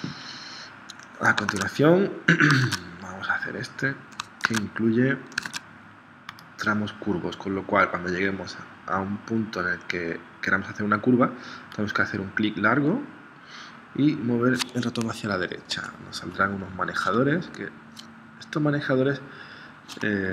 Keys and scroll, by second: 1.5 super+Tab, 2.7 super+Tab, 4.4 super+Tab, 5.5 super+Tab.